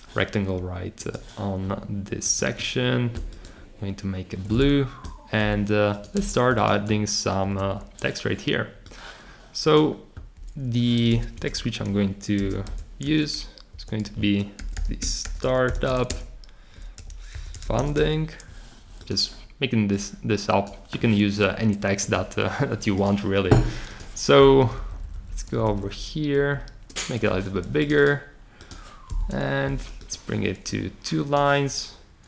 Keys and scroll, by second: 6.1 super+c, 7.4 super+v, 11.3 Return, 12.1-18.4 typing, 24.6 Up, 25.0 Up, 25.1 Up, 25.2 Up, 26.3 shift+Up, 29.1 Return.